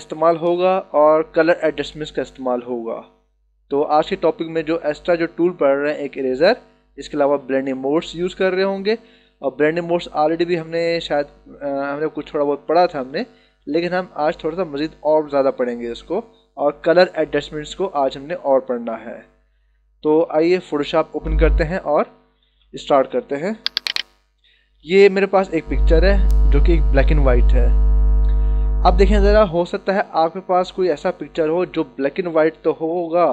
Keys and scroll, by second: 22.5 d, 23.9 space.